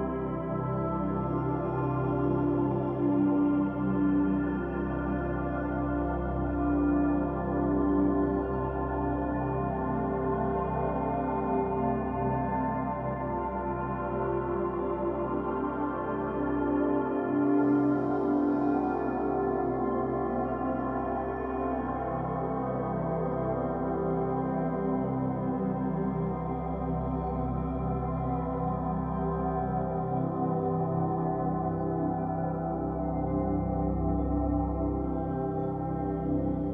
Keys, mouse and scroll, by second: 1.1-2.1 drag, 2.7 click, 9.9-12.9 middle drag, 15.5-18.5 shift+middle drag, 19.2 click, 22.2 e, 27.0 click, 28.6 shift+middle click, 29.2-29.7 scroll up 2, 29.7-32.2 shift+middle drag, 32.2 s.